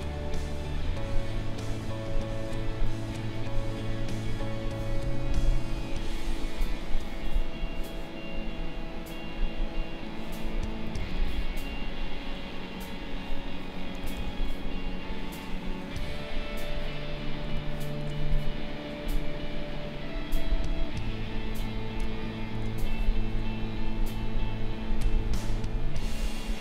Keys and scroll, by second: 5.4 space, 14.1 ctrl+z, 17.5 space, 22.0 space.